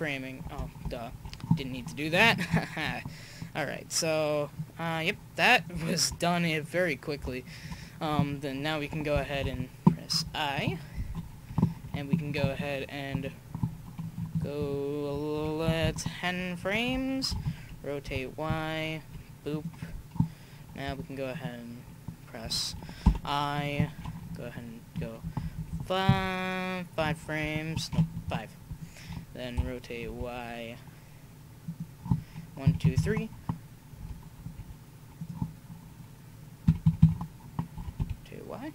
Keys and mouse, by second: 1.1 ctrl+z, 5.5-7.9 drag, 7.9 middle click, 9.4 i, 14.4 Right, 14.8 Right, 15.8 Left, 17.3 r, 21.3-23.6 right drag, 23.1 i, 24.2 Right, 24.7 Right, 25.2-25.7 Left, 26.1 Left, 28.1 Left, 29.5 r, 32.6 Right, 32.8 Right, 34.0 r, 36.6 Right, 36.8 Right, 37.8 r.